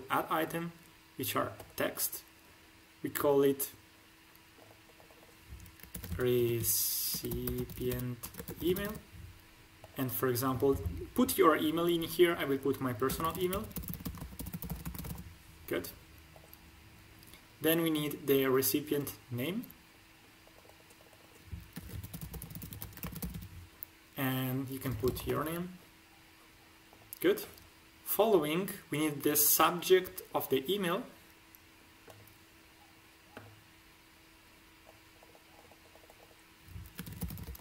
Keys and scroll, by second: 5.9-8.7 typing, 13.0-14.9 typing, 14.1 ctrl+alt+`, 21.7-23.3 typing, 24.8 shift+p, 25.0 o, 25.2 l, 25.3 o, 37.0-37.6 typing.